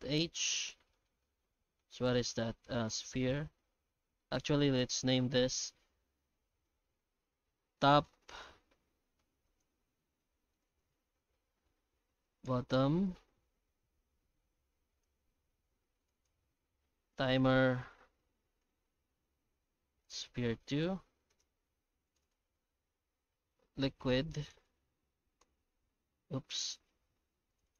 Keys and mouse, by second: 0.1 alt+a, 0.4-0.7 middle drag, 0.9 shift+middle click, 1.2-1.8 middle drag, 2.8-3.5 alt+right drag, 3.9 shift+middle click, 4.4 middle drag, 4.8 right click, 6.4 click, 6.5-8.8 drag, 9.4 right click, 10.7-13.5 drag, 12.0 t, 15.0 right click, 16.1-19.5 drag, 20.0 click, 20.7 g, 22.2-27.2 drag, 27.5 click, 27.6-27.7 drag.